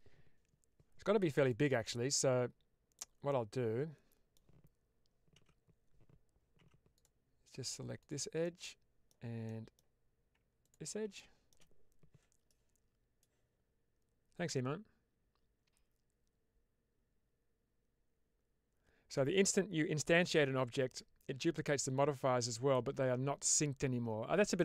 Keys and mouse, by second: 1.3 click, 1.7-2.8 middle drag, 3.2-4.3 middle drag, 5.3 3, 6.5 2, 7.9 click, 8.3 middle click, 9.3 middle click, 11.1 shift+middle click.